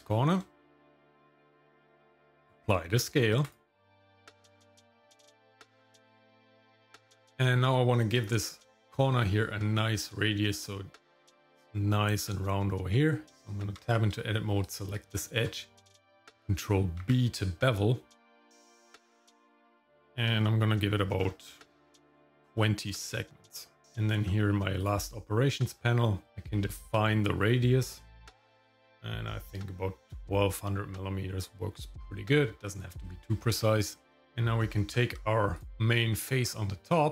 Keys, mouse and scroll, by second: 0.6 shift+middle click, 1.0 scroll up 1, 1.4 shift+middle click, 2.3 ctrl+a, 4.4 shift+middle click, 4.7 middle click, 5.1 scroll up 1, 5.9 shift+middle click, 6.4 middle click, 7.0 shift+middle click, 13.2 Tab, 14.6 click, 15.1 shift+middle click, 17.0 ctrl+b, 24.8 click, 26.3-31.4 drag, 34.2 middle click, 34.8 Tab, 35.5 click, 35.7 shift+middle click, 35.7 scroll up 1, 36.0 scroll down 1, 36.4 shift+middle click, 37.0 shift+middle click.